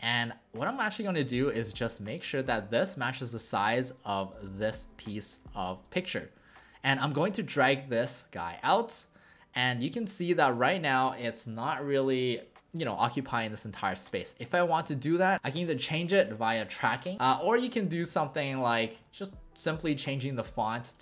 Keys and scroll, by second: 10.8 w, 13.8 w, 14.5 ctrl+a, 17.1 ctrl+z, 17.1 w, 18.0 ctrl+z, 18.9 ctrl+a.